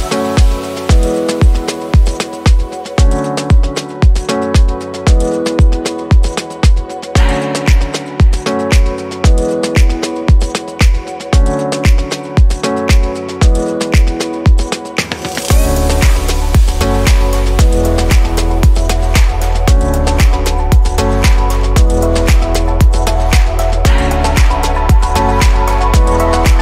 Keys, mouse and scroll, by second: 0.0 click, 1.1-2.7 scroll down 2, 2.7-4.3 drag, 10.8-12.0 scroll up 3, 12.0-16.6 shift+middle drag, 16.6 click, 17.1 scroll up 3, 18.6 alt+shift+click, 20.5 click, 23.0 alt+shift+click.